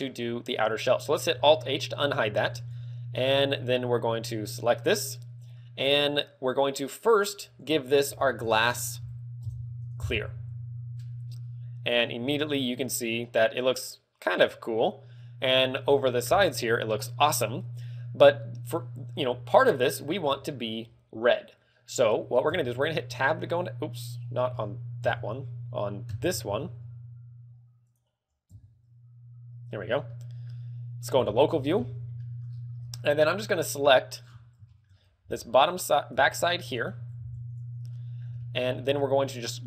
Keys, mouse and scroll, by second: 0.1-0.6 scroll down 3, 1.3 alt+h, 1.9 a, 2.3 ctrl+w, 4.7 right click, 6.9 click, 13.1 middle click, 27.8 click, 29.2 Tab, 30.1 scroll down 2, 30.2 shift+middle click, 31.1 KP_Divide, 31.7-32.1 scroll up 3, 32.1 shift+middle click, 32.4-32.9 scroll up 6, 32.9 a, 33.1 z, 33.7 KP_3, 34.1-34.5 scroll down 5, 34.6 shift+middle click, 34.8 scroll up 3, 35.1 b, 36.1 b, 37.0 a, 37.1 b, 37.8 middle click, 38.3 shift+middle click, 38.6-39.3 scroll up 4, 38.7 z.